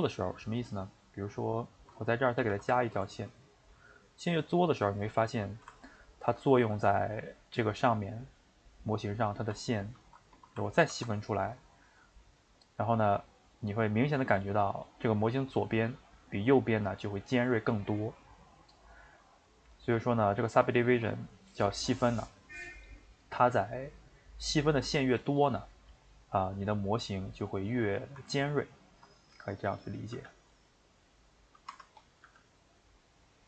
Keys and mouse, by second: 2.4 ctrl+r, 5.0-10.8 middle drag, 10.8 ctrl+b, 12.6-14.1 middle drag, 14.1 click, 14.5-19.7 middle drag, 19.7 click, 22.4-25.0 middle drag, 25.0 ctrl+z, 25.2 ctrl+z, 25.4 ctrl+z, 26.3-29.7 middle drag, 29.7 click, 30.1 g, 30.9 middle click, 31.8 Tab, 32.0 click, 32.2 g.